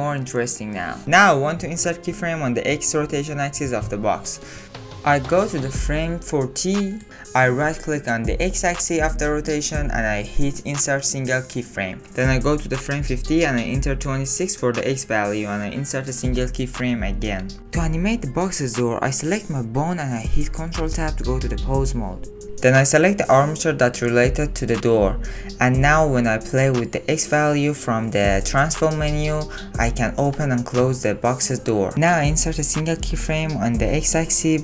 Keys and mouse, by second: 0.8 space, 1.0 n, 1.3 n, 2.5-3.9 drag, 5.0 ctrl+z, 7.4 click, 8.8 click, 12.0 click, 13.3 Right, 14.5-15.9 drag, 15.9 middle click, 16.5 click, 19.1 click, 20.3 ctrl+Tab, 23.1 click, 26.2-29.4 drag, 29.8 ctrl+z, 32.0-33.1 drag.